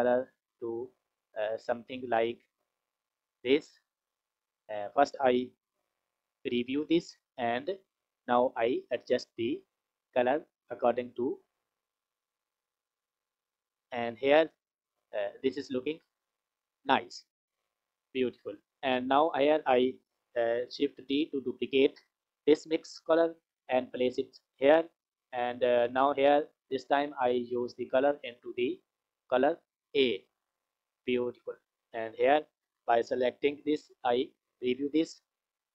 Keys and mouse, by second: 6.5 ctrl+shift+click, 8.5 click, 18.4 click, 19.2 click, 20.9 shift+d, 22.9 click, 23.6 click, 27.4-30.4 drag, 31.9 click, 34.0 ctrl+shift+click, 35.5 click.